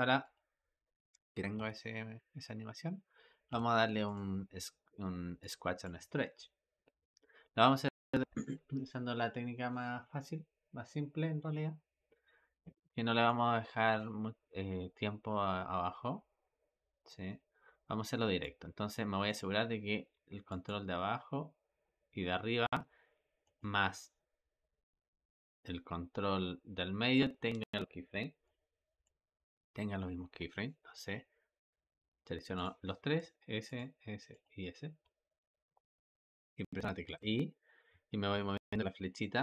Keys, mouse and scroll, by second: 0.1-0.4 drag, 1.4 space, 3.3 space, 3.9 click, 5.2-16.4 drag, 19.2 click, 23.4 shift+click, 28.3-32.5 drag, 33.6 shift+click, 34.3 shift+click, 37.0 i.